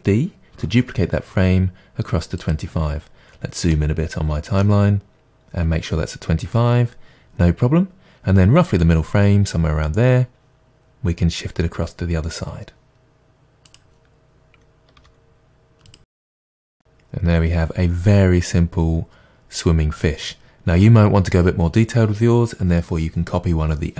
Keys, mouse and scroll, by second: 0.7 shift+d, 2.5 click, 3.0-3.7 scroll up 1, 3.7-8.7 middle drag, 5.1-5.7 scroll up 1, 8.7 click, 13.2-13.6 drag, 13.6-15.9 typing, 14.2 drag, 14.8 click, 15.8 click, 16.5-23.9 drag.